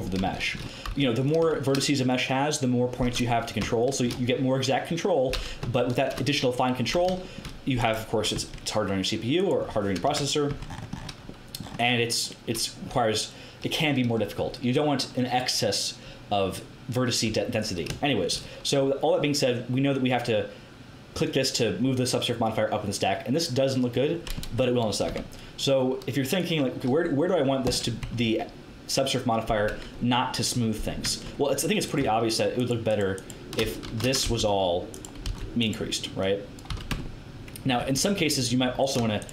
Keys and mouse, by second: 0.8 x, 8.3 Tab, 10.0 KP_Decimal, 10.4 Tab, 21.1-24.3 drag, 24.3 Tab, 26.2-27.8 drag, 28.0 Tab, 31.0 Tab, 33.8 z, 34.2 c, 35.2 c, 36.6 z, 36.8 Tab, 37.7 Tab.